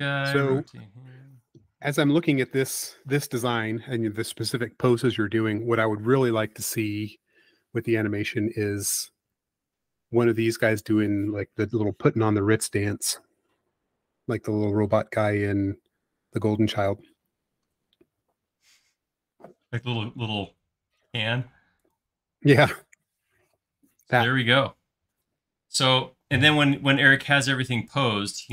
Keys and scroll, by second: 0.2 q, 1.9 space, 2.9 q, 4.7 Right, 5.3 Left, 7.9 space, 9.2 q, 11.2 Right, 11.9 Left, 21.6 space.